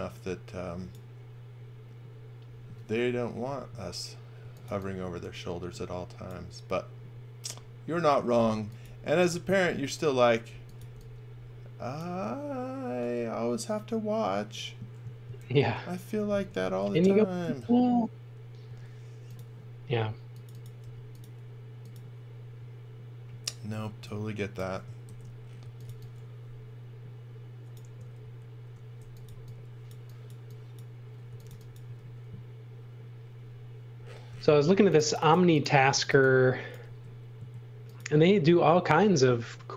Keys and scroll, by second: 4.2-5.2 typing, 8.5 space, 10.5 x, 10.8 v, 15.4 shift+3, 16.7 shift+2, 18.7 a, 20.8 b, 23.8 e, 25.0-26.3 typing, 28.2 shift+2, 29.0 x, 29.3 v, 31.0-32.0 typing, 34.4 space, 35.9 x, 36.2 v, 36.9 s.